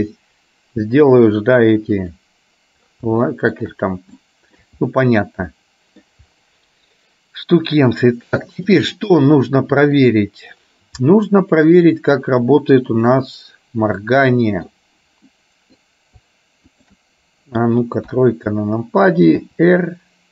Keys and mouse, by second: 2.2 click, 3.3 shift+middle click, 4.3 shift+middle click, 5.6 middle click, 8.8 click, 9.3 middle click, 11.2-12.2 middle drag, 12.9 click, 14.1 middle click, 15.4 middle click, 16.8 shift+click, 18.2 KP_3, 19.6 r.